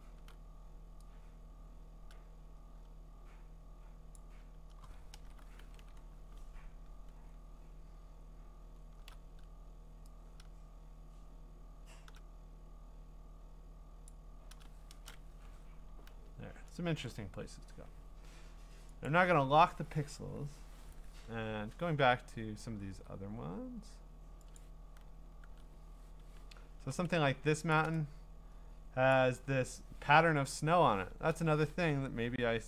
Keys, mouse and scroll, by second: 0.0 scroll, 4.1 click, 5.2 alt+BackSpace, 5.6 ctrl+d, 6.0 scroll, 6.1-8.2 scroll down 20, 8.4-8.8 scroll down 1, 8.8 scroll, 14.1 click, 14.9 alt+BackSpace, 15.3 ctrl+d, 15.7-17.0 scroll, 19.1 click, 19.9 ctrl+Tab, 22.7 ctrl+w, 24.6 click, 25.4 ctrl+Tab, 26.1 scroll, 26.2 scroll down 3, 26.4-27.1 scroll, 27.1 v, 27.7 ctrl+click, 29.1 click, 31.1 ctrl+t, 31.9 Escape.